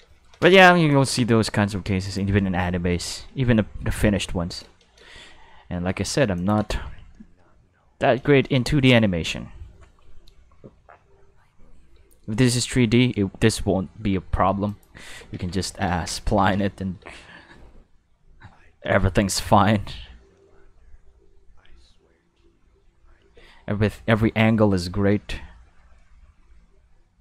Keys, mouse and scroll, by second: 0.1 shift+middle click, 0.4 space, 0.9 click, 2.0 click, 2.6-5.0 typing, 5.2 middle click, 5.5 middle click, 5.7 middle click, 6.3 click, 6.6 space, 8.3 shift+middle click, 10.8 middle click, 10.8-11.4 scroll, 11.2 middle click, 11.9 space, 14.7 click, 15.2 ctrl+s, 15.6 ctrl+Tab, 16.4 ctrl+Tab, 17.0 space, 23.3 space, 24.1 middle click, 24.5 middle click, 25.1 space.